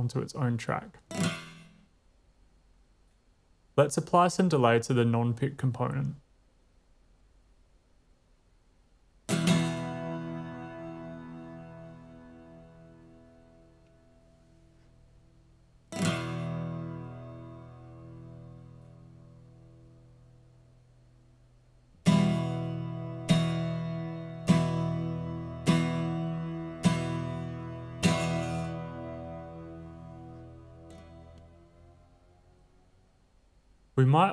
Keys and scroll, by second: 2.2 space, 6.0 super+v, 9.0 typing, 10.8 typing.